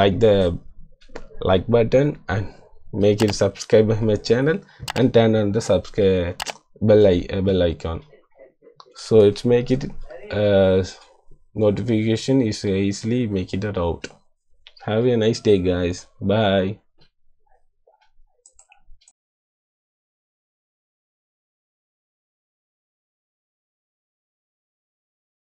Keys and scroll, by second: 9.3 -, 9.5 -.